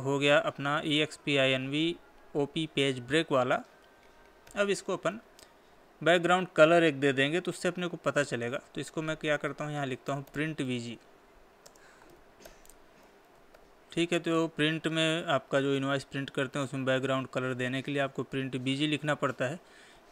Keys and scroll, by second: 12.2 space.